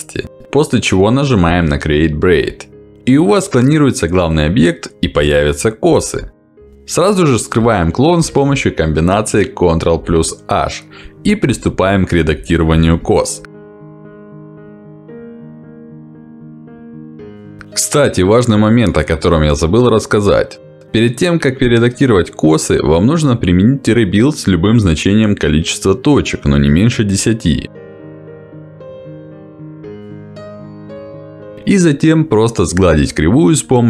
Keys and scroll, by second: 29.9 Escape.